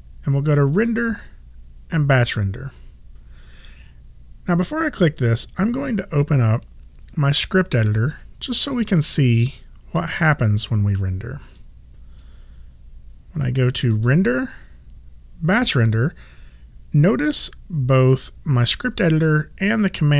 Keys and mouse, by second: 0.7 click, 8.6 click, 11.5 click, 13.9 click.